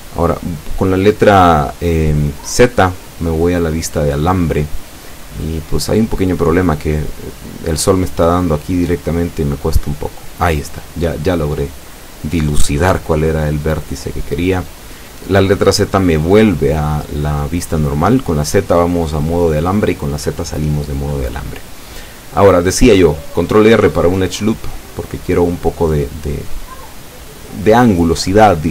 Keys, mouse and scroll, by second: 0.8 ctrl+r, 4.0 Escape, 5.0-6.1 middle drag, 8.2 right click, 9.6 l, 11.1 z, 12.2-15.5 middle drag, 16.5 right click, 17.6 l, 18.9-20.8 drag, 21.3 Tab, 21.7-22.5 middle drag, 22.3 Tab, 22.8 z, 23.3 scroll down 1, 23.8 middle click, 24.8-25.2 scroll up 2, 25.5 scroll up 1, 25.9-27.0 middle drag.